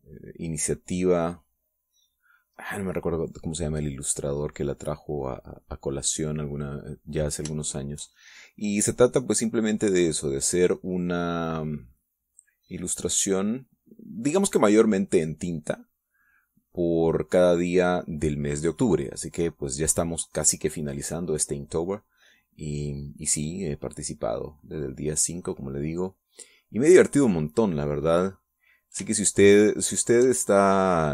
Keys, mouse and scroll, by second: 3.7-6.7 drag, 8.4 shift+click, 8.9-14.2 shift+drag, 15.8-16.9 drag, 17.3-18.7 drag, 20.1-26.0 drag, 27.1 middle click, 30.1-31.1 shift+drag.